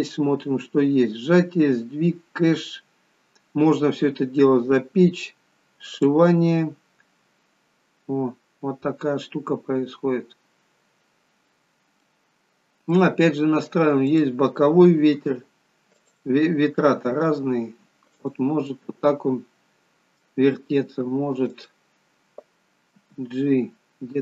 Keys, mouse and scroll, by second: 1.3-6.0 scroll down 4, 6.0 click, 6.0-9.0 scroll down 3, 11.6-14.1 scroll down 3, 12.1 middle click, 14.1 click, 15.2 g, 17.1 r, 18.7 middle click, 20.8 r, 23.0 g.